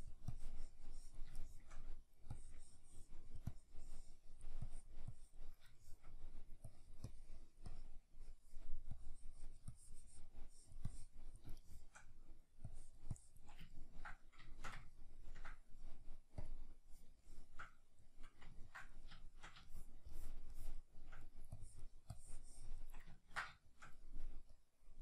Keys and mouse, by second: 1.4 shift+middle click, 2.3-5.8 drag, 5.8 shift+middle click, 6.7-11.7 drag, 11.7-12.7 shift+middle drag, 12.7-13.7 drag, 13.7-21.6 ctrl+middle drag, 21.6-23.2 drag, 23.2-24.7 ctrl+middle drag, 24.7-25.0 drag.